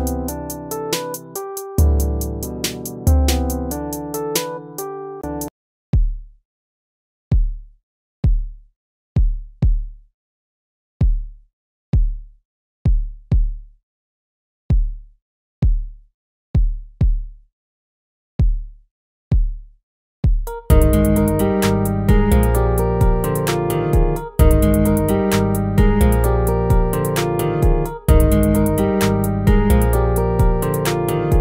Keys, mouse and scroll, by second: 3.3 ctrl++, 7.3 ctrl+-, 8.1 ctrl++, 10.6 ctrl+z, 11.1 ctrl+-, 23.9 ctrl+-, 24.9 ctrl++, 27.2 ctrl+-, 27.5 ctrl++.